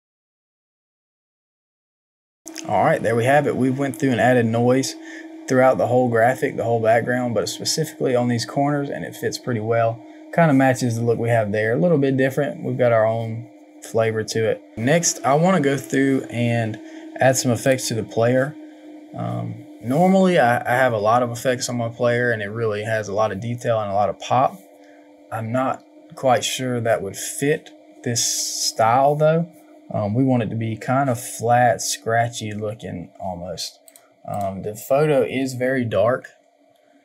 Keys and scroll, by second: 1.1 Return, 14.7 ctrl+z.